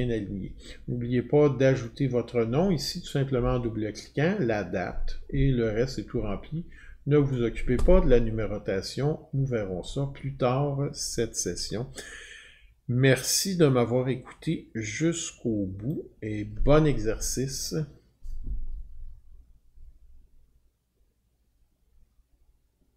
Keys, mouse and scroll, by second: 1.8 click, 3.8 click, 4.6-6.9 drag, 7.3-12.4 drag, 15.2 click.